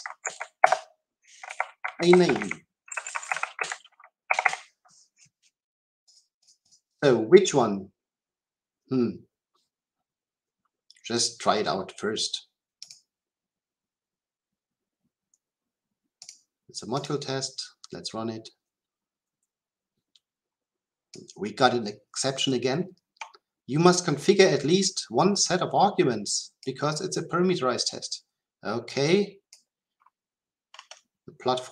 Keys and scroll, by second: 3.3 Delete, 17.0 shift+F10.